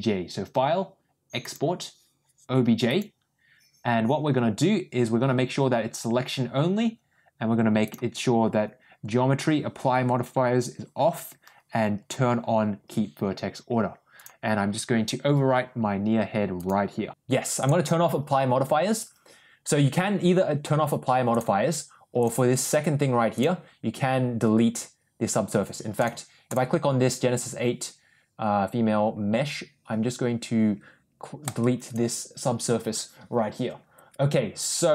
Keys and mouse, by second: 22.1 click, 23.2 click, 31.5 click.